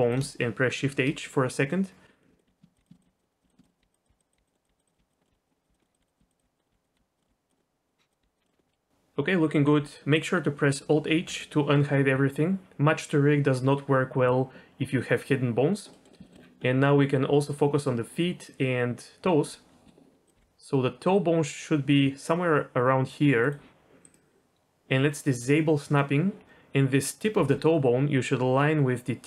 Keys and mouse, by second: 0.8 shift+h, 1.2 middle click, 2.1 middle click, 2.3 shift+middle click, 2.4-8.2 typing, 2.7 click, 3.2 middle click, 3.4 click, 3.6 shift+middle click, 4.5 middle click, 4.6 click, 4.9 middle click, 5.5 click, 5.8 click, 6.1 click, 6.6 click, 7.5 click, 7.6 middle click, 7.8 click, 7.9 click, 8.1 click, 8.4 middle click, 11.1 alt+h, 15.9 middle click, 16.2 shift+middle click, 16.6 ctrl+shift+middle click, 17.3 middle click, 19.8 KP_3, 20.3 g, 25.8 click, 26.4 g, 27.4 g.